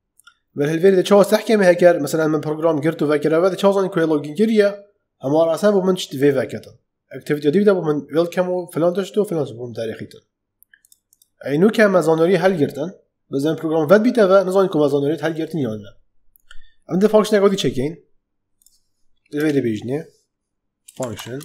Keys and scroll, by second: 19.3 Return, 20.6-21.4 typing.